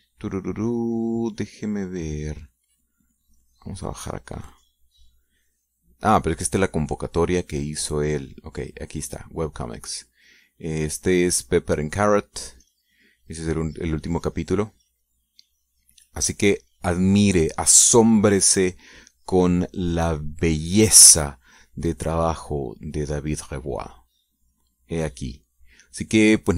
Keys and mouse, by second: 4.1-8.6 drag, 9.3 click, 13.3 click, 16.5-26.2 drag.